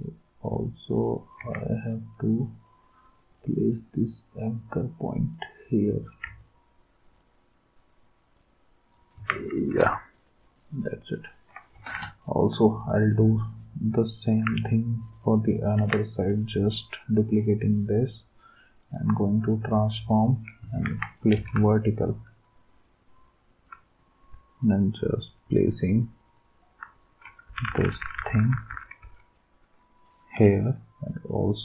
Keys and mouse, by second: 1.4 ctrl+s, 9.2 ctrl+s, 11.7 ctrl+s, 15.8 ctrl+d, 20.8 ctrl+s, 21.6-23.5 Right, 25.9-27.2 Right, 27.4 Right, 27.4 Down, 27.6 Down, 27.8 Down, 28.0 Down, 28.1 Down, 28.3 Down, 28.5 Down, 28.7 Down, 29.0 Right.